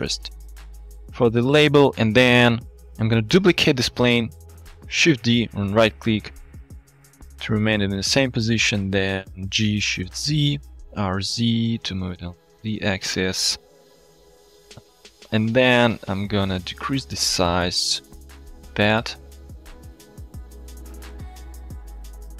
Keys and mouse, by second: 1.8 click, 1.8-2.6 middle drag, 4.7 click, 5.2 shift+d, 6.1 click, 7.3 KP_7, 8.3 shift+drag, 9.6 g, 10.0 shift+z, 10.9 r, 11.2 z, 13.6 shift+click, 14.3-14.9 drag, 14.9-15.6 middle drag, 15.6 click, 16.3 Tab, 16.8 s, 18.8 click, 19.3 Tab, 20.0 g, 20.1 z, 20.7 click, 21.2-21.7 shift+middle drag.